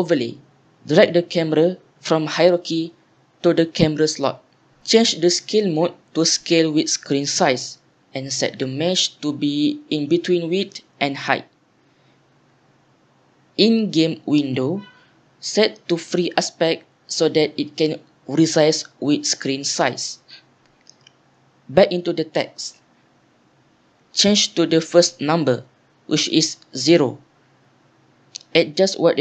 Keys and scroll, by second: 23.2 ctrl+a.